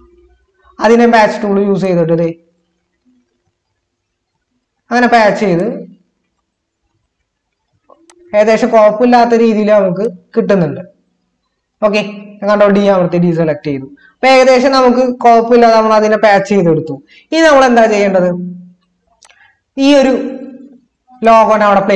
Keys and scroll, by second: 15.2 ctrl+-.